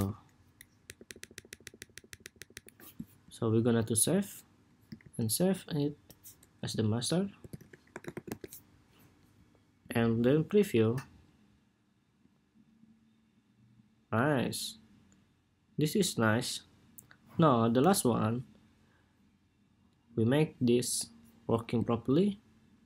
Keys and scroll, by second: 4.7 super+s.